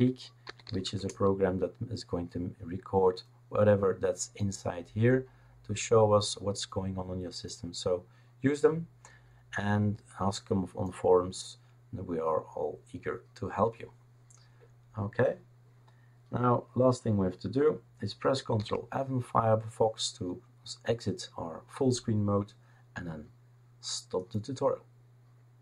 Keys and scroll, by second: 0.0-1.2 typing, 18.6 ctrl+f.